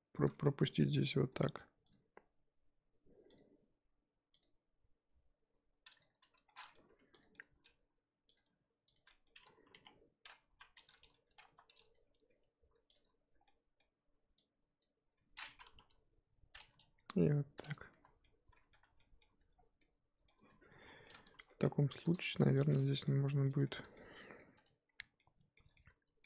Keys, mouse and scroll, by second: 1.3 k, 6.5-6.9 middle drag, 6.9 2, 7.2 click, 7.3-7.6 middle drag, 7.6-8.3 scroll down 1, 8.3 ctrl+click, 8.9 ctrl+click, 9.1 middle click, 9.7 KP_3, 10.2-10.5 scroll up 3, 10.5 z, 11.5 1, 11.9 ctrl+click, 12.9 shift+click, 13.4-14.8 middle drag, 14.8 ctrl+click, 15.8 KP_3, 17.0 g, 18.0 z, 18.2 middle click, 18.7 Tab, 19.0 middle drag, 19.3 z, 19.5 scroll down 1, 19.8-20.3 middle drag, 20.3 scroll down 1, 20.5 Tab, 20.7-21.0 scroll up 5, 21.0-22.7 middle drag, 22.7 click, 22.8 middle click, 23.1 g, 23.7 middle click, 24.2-24.5 scroll down 2, 24.5 2, 24.8-25.1 scroll up 2, 25.2-26.2 middle drag.